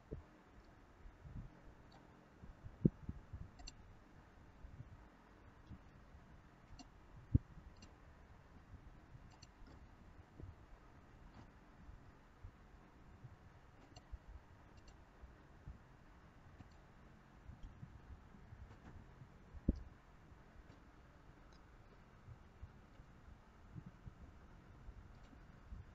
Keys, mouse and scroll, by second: 0.7 middle click, 3.5 click, 5.7 g, 7.7 click, 8.5 g, 9.7 middle click, 11.8 g, 14.7 click, 15.6 g, 17.6 r, 19.8 middle click.